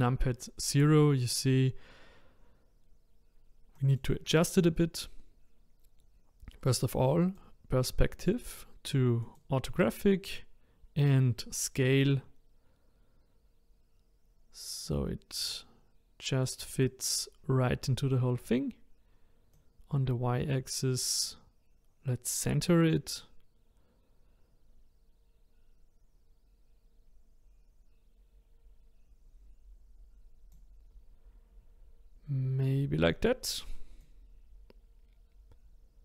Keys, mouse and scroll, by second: 3.7 click, 7.2-10.3 drag, 11.1-14.2 drag, 19.5-22.7 drag, 34.0-36.0 drag.